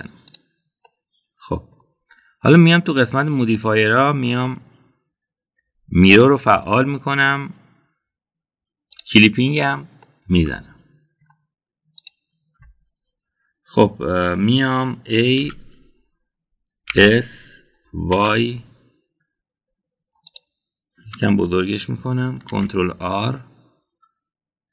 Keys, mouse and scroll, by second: 1.7-2.7 middle drag, 3.8 drag, 4.4-7.1 drag, 9.8 click, 10.9-12.2 middle drag, 13.0 click, 16.3 a, 17.8 s, 23.4 ctrl+r.